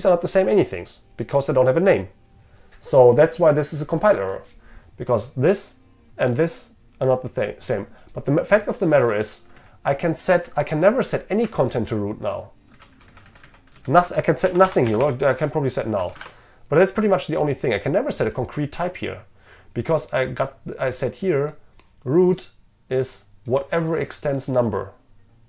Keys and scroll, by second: 12.8 ctrl+shift+Left.